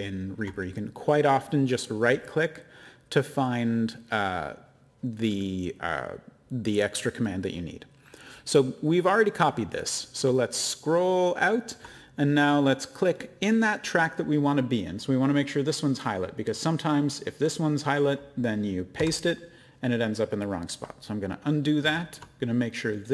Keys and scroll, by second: 18.9 v, 21.8 ctrl+z.